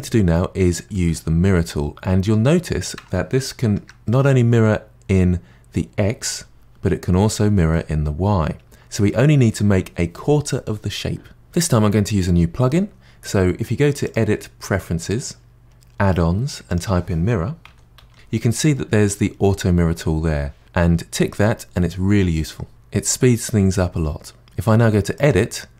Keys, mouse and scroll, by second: 0.2-0.9 scroll up 1, 0.9-2.6 middle drag, 2.6-3.4 scroll down 2, 3.4-7.0 middle drag, 7.7-10.7 middle drag, 11.4-13.7 middle drag, 14.0-15.6 drag, 25.2 click.